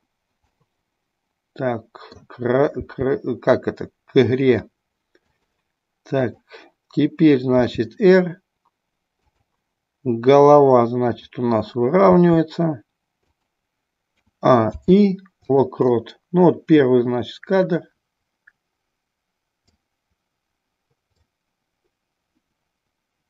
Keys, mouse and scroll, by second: 0.5-2.2 middle drag, 5.4 click, 6.3 click, 7.8 r, 13.4 click, 14.3 a, 14.8 i, 16.9-19.9 drag, 21.3-23.2 drag.